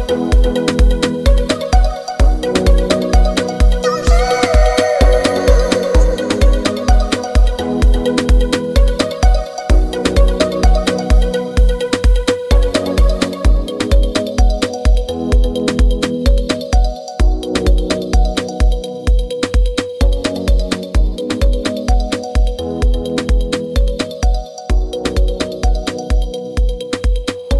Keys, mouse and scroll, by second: 24.8 click.